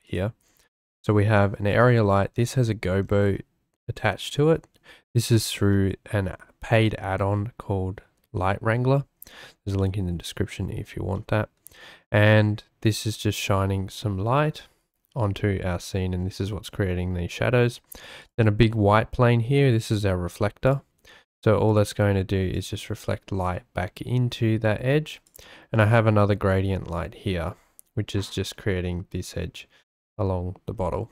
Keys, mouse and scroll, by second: 5.7-6.4 shift+middle drag, 9.8-10.8 middle drag, 11.2 shift+middle click, 14.7-16.9 middle drag, 18.2 click, 20.6 click, 21.5-23.3 right drag, 25.2 drag, 25.7-26.3 drag, 26.5-27.1 shift+drag.